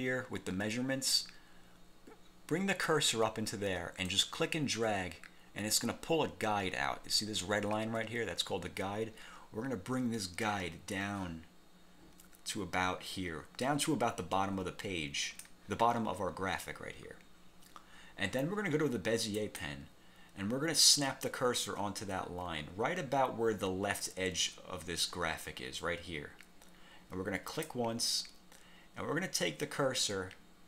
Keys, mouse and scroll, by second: 4.2-15.8 drag, 19.5 click, 27.6 click.